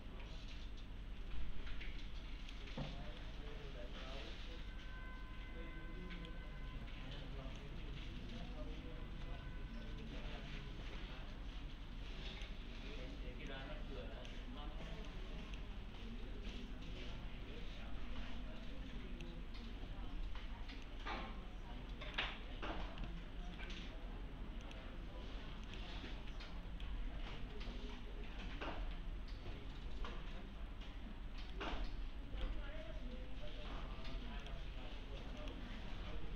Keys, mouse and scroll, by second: 3.2-6.3 right click, 7.6-12.6 click, 23.6 right click, 24.7 click, 26.3-26.9 right click, 31.5-32.5 right click, 34.4 click.